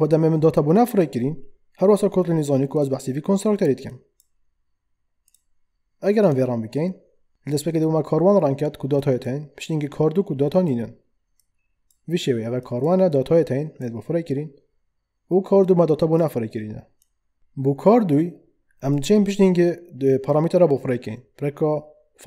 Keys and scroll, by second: 17.4 ctrl+z.